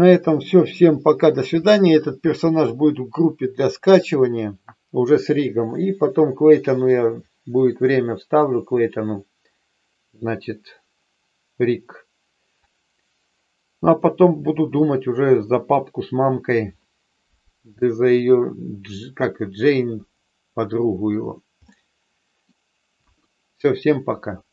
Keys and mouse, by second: 21.6 middle click, 22.9 KP_1.